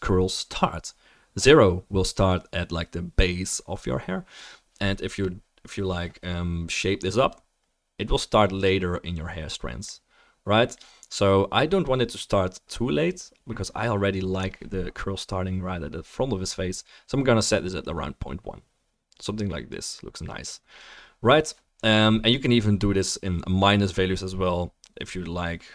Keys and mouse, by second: 7.3-8.7 middle drag.